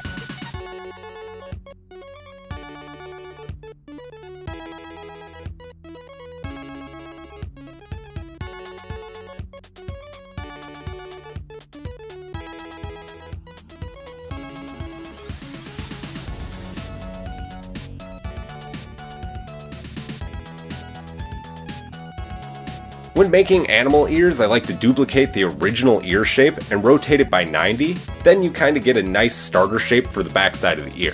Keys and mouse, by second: 0.7 shift+click, 2.0 m, 2.7-4.2 middle drag, 4.2 shift+click, 4.3 shift+middle click, 6.4 s, 11.1-14.7 shift+middle drag, 12.7 g, 16.5 g, 21.3-23.9 middle drag, 24.1 alt+click, 24.3 shift+middle click, 24.9-28.9 middle drag, 26.3 shift+d, 28.1 r, 29.9 KP_7.